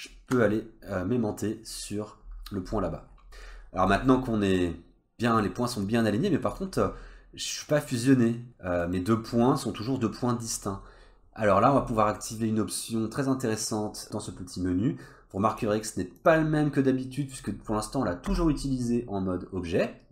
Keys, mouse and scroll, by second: 0.7-1.7 scroll down 3, 1.7 middle click, 2.1-3.0 scroll up 4, 3.3-3.9 scroll down 4, 3.9 middle click, 4.5 click, 5.1 scroll up 1, 5.4 middle click, 5.9 click, 6.7-7.7 scroll down 2, 7.7 click, 8.1 click, 8.4 click, 8.8 middle click, 9.2-10.8 scroll up 2, 11.9 middle click, 14.0 click, 16.2 click, 18.3 Tab.